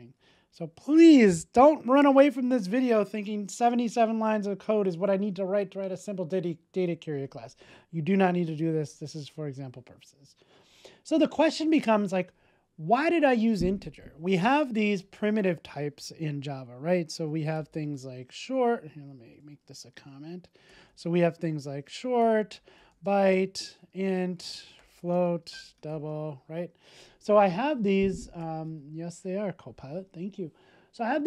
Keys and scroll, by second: 0.6 super+s.